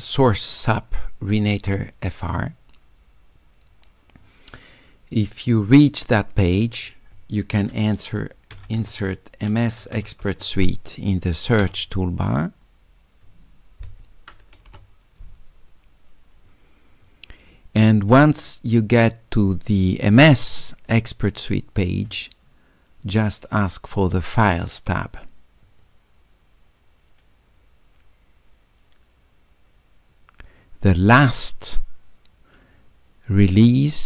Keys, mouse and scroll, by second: 6.4 click, 8.8 s, 25.6 click.